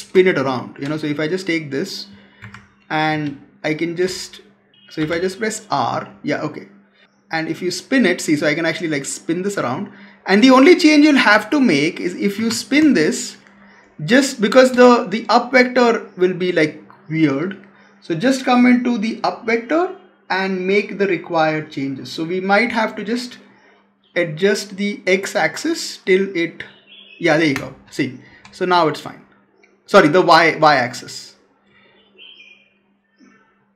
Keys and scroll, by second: 2.3 Escape, 3.9 space, 12.2 Escape, 12.7 space, 27.4 space.